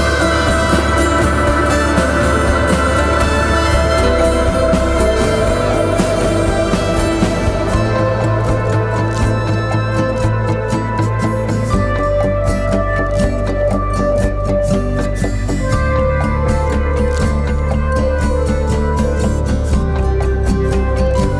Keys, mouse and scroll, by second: 20.1 typing, 20.9 double click.